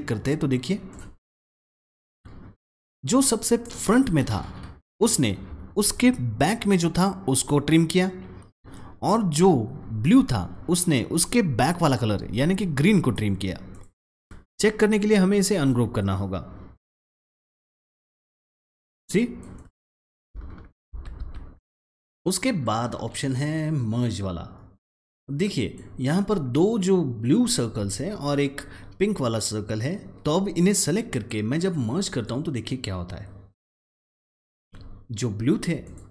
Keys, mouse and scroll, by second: 2.4 click, 13.6 click, 15.4 right click, 17.2 click, 19.5 double click, 20.6 ctrl+z, 22.0-25.2 drag, 25.5 click, 30.6-33.8 drag.